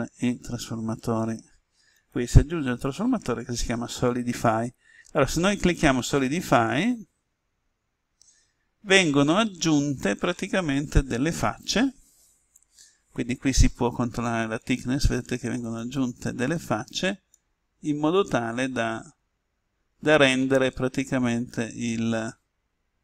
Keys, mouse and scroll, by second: 1.1-23.0 drag.